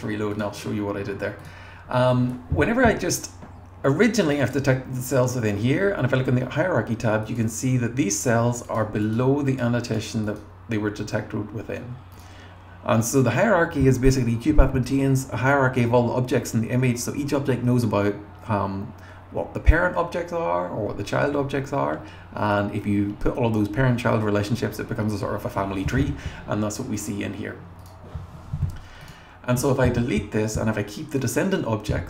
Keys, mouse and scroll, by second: 1.4 click, 4.2 click, 4.4 click, 6.5-7.3 scroll up 1, 7.3 click, 8.2 click, 8.7 click, 9.0 click, 9.5 click, 9.9 click, 10.2 click, 11.4 scroll down 2, 12.1 click, 26.9 click, 27.8 click, 29.0 click, 29.6 BackSpace.